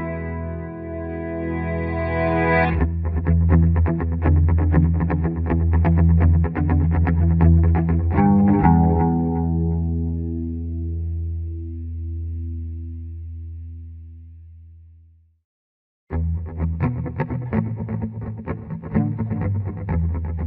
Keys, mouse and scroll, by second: 6.1-8.7 ctrl+drag, 8.7-10.6 ctrl+drag, 10.6 ctrl+z, 12.1 click, 12.9 Escape, 13.1 F3, 16.3-18.1 drag, 18.1 shift+F2, 18.7 Escape, 19.1 click, 19.8 F3, 20.2 F2.